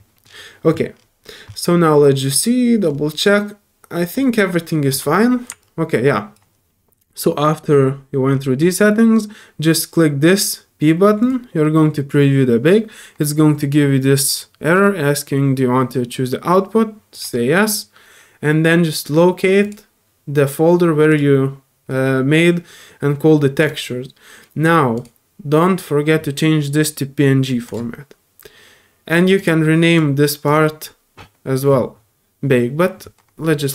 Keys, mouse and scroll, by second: 0.2 middle click, 5.1 middle click, 5.6 alt+click, 11.2 click, 17.1 click, 19.6 click, 21.1 click, 23.5 click, 23.7 click, 24.9 click, 27.6 click, 29.3 click, 29.9 click, 30.4 click.